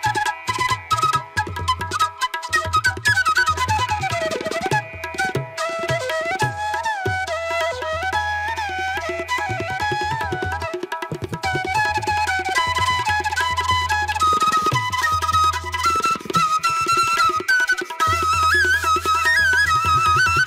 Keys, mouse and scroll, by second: 0.6 ctrl+alt+z, 0.9 ctrl+alt+z, 1.3 ctrl+-, 3.3 ctrl+=, 5.9 ctrl+=, 7.1 space, 7.8 ctrl+alt+z, 10.8 space, 15.1 ctrl+=, 15.6 ctrl+=, 16.7 ctrl+=, 16.8 space, 17.9 ctrl+=, 18.9 ctrl+alt+z.